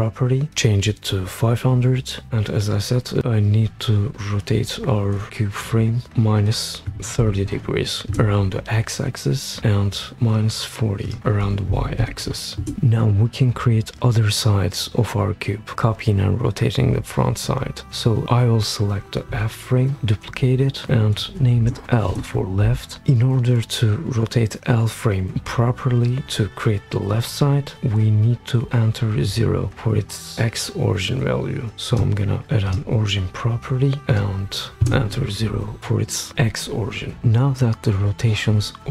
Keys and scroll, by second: 6.6-7.7 typing, 8.1 Return, 11.4-12.7 typing, 20.0 super+d, 21.5 shift+l, 22.1 Return, 34.8 0, 34.8 Return.